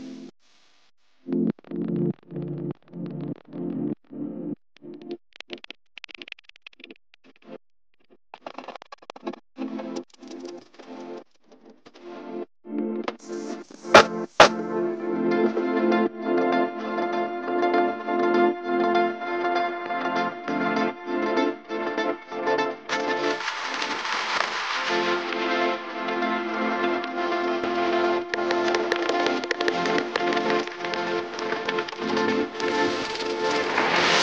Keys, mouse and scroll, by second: 8.9 alt+click, 15.7 shift+click, 19.2 shift+click, 20.7 double click, 28.4 alt+click, 31.4 double click, 33.3 shift+click, 33.9 right click.